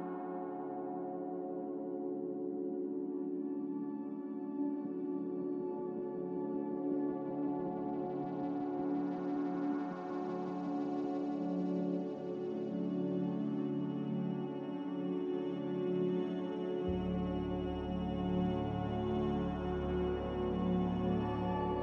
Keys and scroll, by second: 1.6 g, 5.7 Escape, 6.5 a, 7.7 Delete, 8.9 Delete, 9.5 Delete, 14.5 g, 18.8 Escape, 19.1 Escape, 20.3 z.